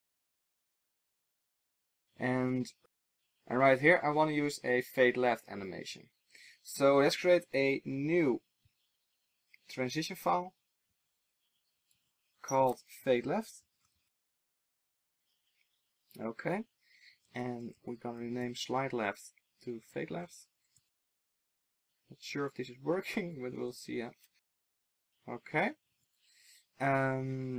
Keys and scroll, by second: 11.0 super+c, 13.9 ctrl+alt+shift+Left, 17.5 ctrl+alt+shift+Left, 22.0 Escape, 22.8 ctrl+alt+shift+Left, 26.0 super+s.